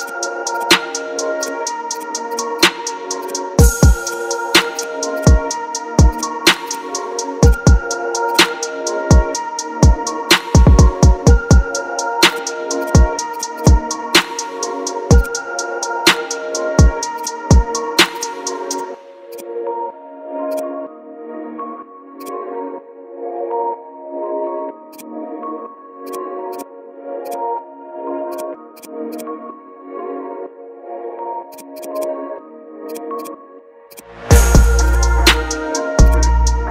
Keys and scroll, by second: 9.3 ctrl+d, 13.9 ctrl+g, 16.6 ctrl+KP_Add, 17.1 space, 17.6 ctrl+KP_Add, 18.0 space, 20.9 ctrl+z, 22.9 ctrl+KP_Add, 26.4 space, 30.5 ctrl+KP_Subtract, 31.4 space, 35.3 ctrl+t, 36.6 space.